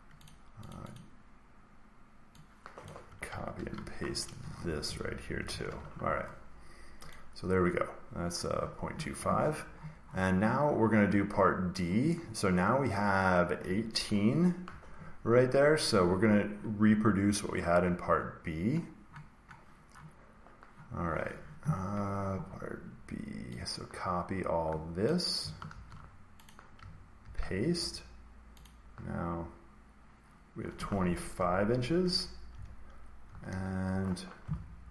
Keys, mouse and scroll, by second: 0.2 click, 0.6 click, 0.9 click, 2.8 click, 3.5 ctrl+c, 4.3 Escape, 4.7 Right, 4.9 Right, 5.2 Escape, 5.7 ctrl+v, 7.0 click, 9.3 scroll, 9.4-12.6 scroll down 89, 12.2 middle click, 12.6 scroll, 13.6-15.2 middle drag, 13.6-14.8 scroll down 10, 14.8 scroll, 14.8-15.2 scroll down 13, 15.3-18.7 scroll, 18.7-20.1 scroll up 39, 20.6-21.2 scroll down 21, 21.8 scroll, 24.9 click, 25.6 ctrl+c, 26.4 click, 27.2 ctrl+v, 28.5 click, 30.9-31.3 typing, 31.9 Return, 32.4 Up, 33.2 shift+Right, 33.4 shift+Right, 33.8-34.6 typing.